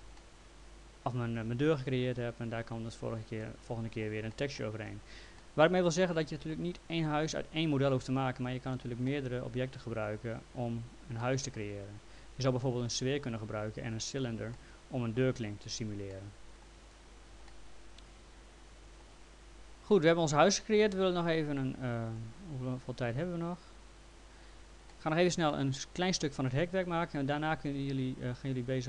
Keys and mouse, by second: 0.2 alt+middle click, 3.4 middle click, 4.3 alt+middle click, 5.4 alt+middle click, 6.3 middle click, 9.1 alt+middle click, 11.2 middle click, 14.6 alt+middle click, 16.1 alt+middle click, 17.5 alt+middle click, 20.5 middle click, 20.9 alt+middle click, 22.9 click, 24.9 alt+middle click, 25.5 middle click, 26.0 alt+middle click.